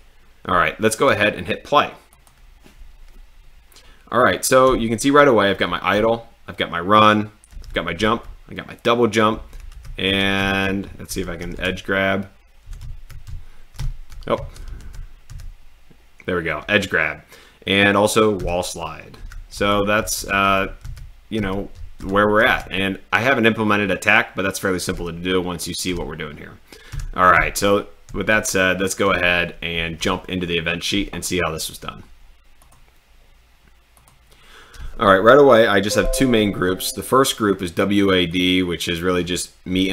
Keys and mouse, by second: 2.2 click, 6.1 d, 7.6 w, 9.4-15.3 typing, 19.7-22.5 typing, 24.9 w, 25.9 w, 26.9-29.7 typing, 32.6 click, 33.9 click.